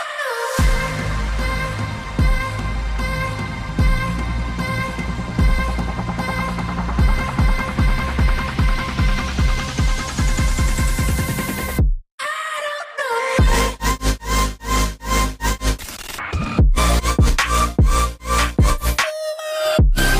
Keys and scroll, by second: 3.3 ctrl+shift+], 10.7 ctrl+z, 10.9 ctrl+z, 11.1 ctrl+z, 15.1 ctrl+shift+].